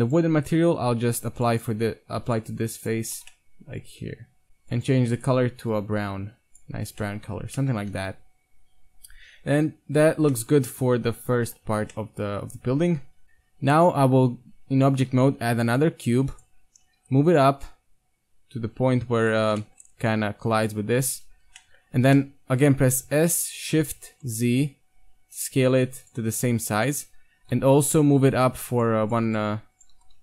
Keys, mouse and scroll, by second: 0.1 click, 0.4 Tab, 0.9 ctrl+Tab, 3.2 Tab, 3.3-4.1 middle drag, 5.3-6.9 drag, 6.9-7.3 middle drag, 7.3 Tab, 7.8 Tab, 8.1 KP_1, 9.6 Tab, 11.7 Tab, 13.2 a, 15.2 shift+a, 17.0 g, 19.4 z, 19.7 middle click, 20.5 middle drag, 20.9 z, 21.6 middle drag, 22.9 s, 26.4 Tab, 26.8 Tab, 27.4 KP_1, 27.5 Tab, 28.3-30.2 right drag, 29.5 z, 30.0 g.